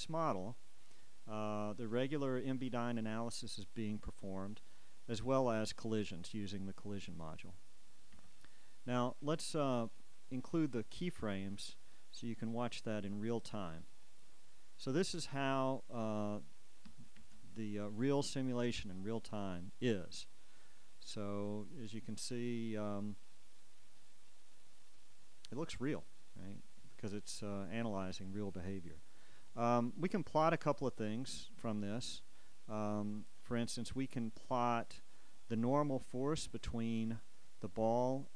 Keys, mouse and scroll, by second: 2.2-7.3 drag, 8.3 Escape, 10.5-12.0 drag, 13.8 click, 20.5 alt+a, 29.1 Escape, 31.3-35.4 drag, 37.2 click.